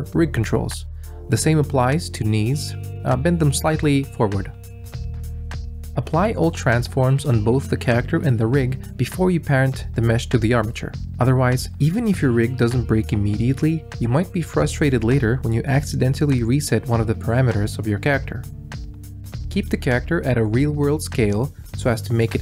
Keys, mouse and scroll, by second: 2.7 ctrl+z, 2.8 g, 5.6 ctrl+a, 6.4-7.6 drag, 7.8 ctrl+a, 11.5 alt+a, 13.0 click, 14.4-14.7 middle drag, 15.5 alt+r, 17.2 middle click, 17.8 middle click, 18.2 r, 19.2-21.2 drag.